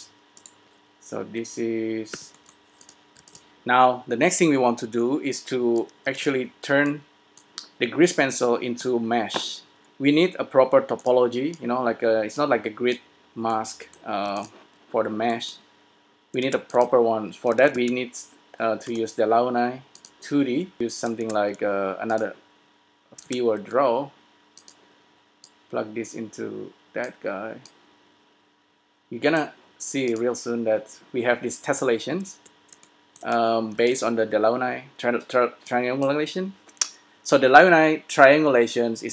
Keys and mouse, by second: 2.2 g, 3.3 s, 6.2 s, 13.2-14.6 drag, 14.6 s, 16.8 shift+a, 20.4 click, 20.8 s, 21.4 shift+a, 22.3 click, 23.4 shift+d, 30.4-31.9 drag, 34.3 s, 36.1-37.7 drag.